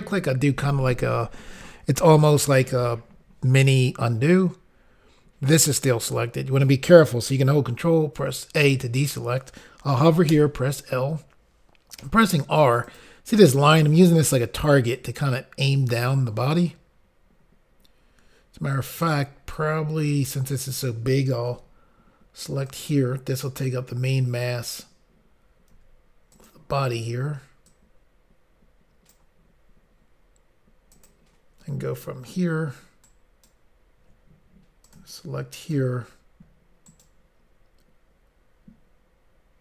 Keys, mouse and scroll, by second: 8.2 alt+a, 12.9 click, 12.9 r, 13.0 click, 15.0 click, 19.1 click, 20.1 click, 21.5 s, 22.7 click, 22.8 click, 23.7 click, 26.4 click, 26.4 s, 26.5 click, 27.7 click, 31.0 click, 33.1 ctrl+right click, 34.9 click, 35.7 shift+click, 36.9 ctrl+right click.